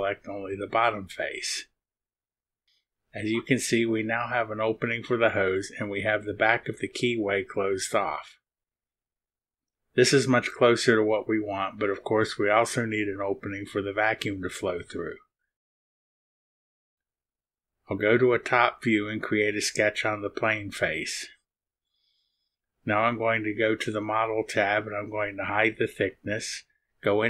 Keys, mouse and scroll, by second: 0.6 click, 1.3 click, 2.8 click, 4.2 middle click, 4.2-5.9 drag, 6.0 click, 7.0-8.5 drag, 8.7 click, 10.2-11.6 drag, 11.8 click, 15.2 click, 15.7 click, 17.1 click, 18.3 click, 21.5 click, 23.7 click, 26.0 click, 27.0 click.